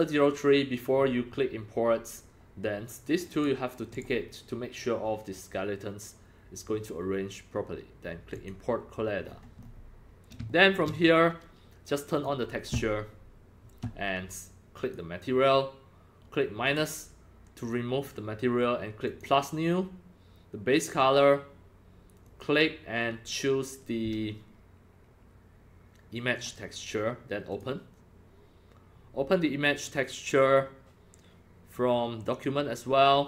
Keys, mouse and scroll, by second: 3.3 click, 3.9 click, 8.3 click, 9.2-9.8 scroll up 11, 9.8 scroll, 9.8 scroll, 9.9-10.5 scroll up 1, 10.5 shift+middle drag, 11.5 shift+middle click, 12.1 click, 14.8 click, 16.6 click, 19.0 click, 22.2 click, 26.3 click, 27.5 click, 32.3 click.